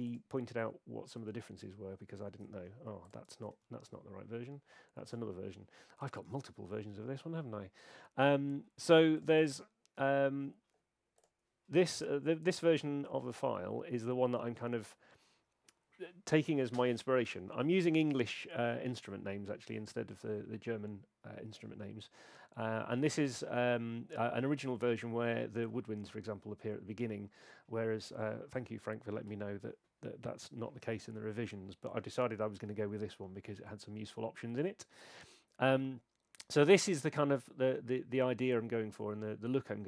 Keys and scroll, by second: 3.4 super+w, 6.0 F11.